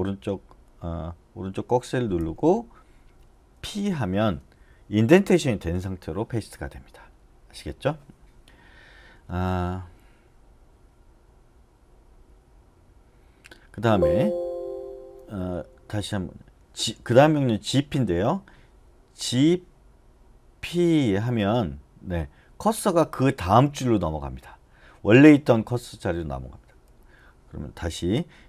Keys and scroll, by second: 2.2 ], 3.5 p, 13.7 Escape, 15.2 d, 15.5 d, 19.2 g, 20.7 p, 27.0 u.